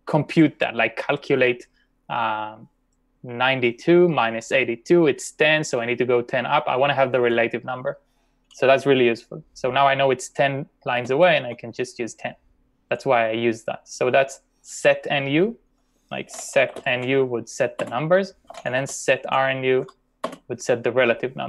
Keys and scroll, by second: 10.8-11.9 typing, 16.1-17.0 typing, 17.8 Return, 18.5 shift+;, 19.9 BackSpace.